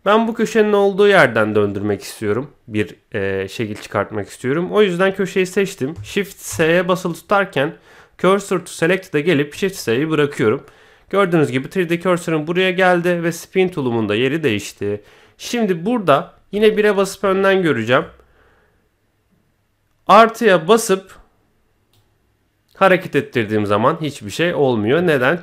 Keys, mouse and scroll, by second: 0.2-0.5 scroll down 1, 0.5 middle click, 6.5 shift+s, 10.6 middle click, 12.2-12.6 scroll down 1, 12.6 middle click, 14.7 middle click, 16.5 KP_1, 17.6 shift+middle click, 20.7-22.0 drag, 25.1-25.4 middle drag.